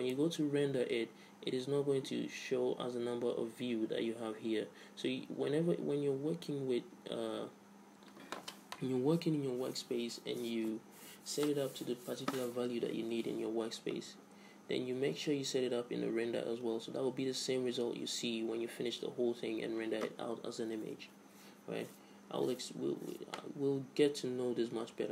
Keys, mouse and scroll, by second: 1.0 middle click.